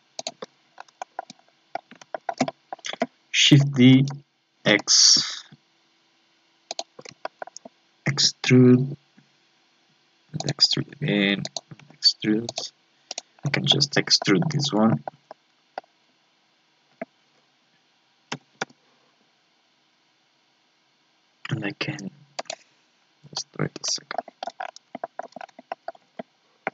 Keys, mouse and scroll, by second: 0.7 scroll down 4, 1.0 shift+middle click, 1.3 scroll up 3, 1.5-3.9 middle drag, 3.9 shift+d, 7.2-8.2 shift+middle drag, 8.2 e, 10.6 e, 13.1 right click, 13.4 scroll down 4, 13.7 middle click, 14.1-14.6 shift+scroll up 4, 14.2 shift+middle click, 14.9-18.3 shift+middle drag, 23.3 KP_7, 24.2 shift+middle click, 24.6 scroll up 4, 25.0 shift+middle click, 25.4 scroll up 1, 25.7-26.7 shift+middle drag.